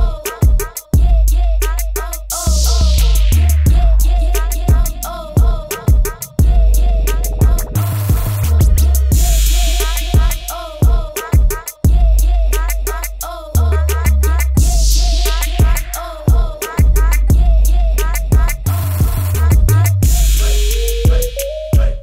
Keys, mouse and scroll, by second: 0.3 Tab, 0.5 click, 8.2 KP_Enter, 8.5 alt+click, 9.8 shift+click, 10.3 ctrl+t, 11.0 click, 14.3 KP_Enter, 14.6 click, 15.5 click, 16.7 Up, 16.9 Down, 17.4 shift+click, 19.1 click.